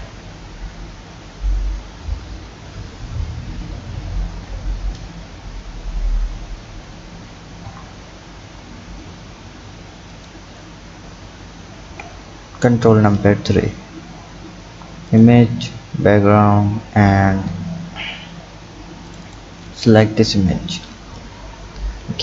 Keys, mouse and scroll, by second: 0.0 KP_1, 2.1 KP_3, 3.4 ctrl+KP_3, 4.1 ctrl+KP_3, 7.6 KP_1, 10.1 click, 11.5 ctrl+KP_3, 14.0 shift+a.